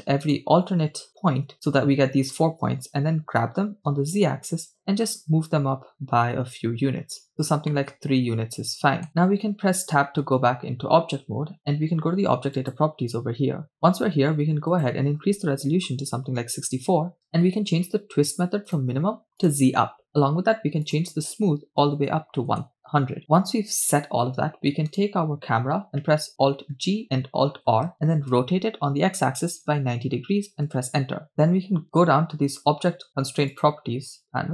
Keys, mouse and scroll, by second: 0.3 shift+right click, 1.2 shift+right click, 3.5 g, 3.9 z, 7.4 ctrl+click, 7.8-10.2 middle drag, 10.2 scroll down 1, 10.3 Tab, 12.7 click, 14.7-19.6 drag, 20.9-23.2 drag, 23.2 0, 24.9-26.5 right drag, 26.9 alt+g, 27.8 alt+r, 28.7 r, 29.6 x, 29.6 9, 29.7 0, 30.7 Return, 33.5 click.